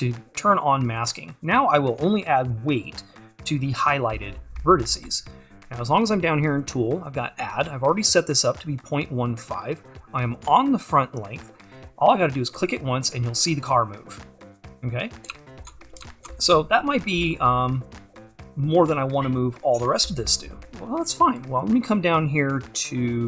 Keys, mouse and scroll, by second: 14.8-15.7 scroll up 2, 16.7-18.6 scroll up 2, 18.6-23.2 scroll up 1.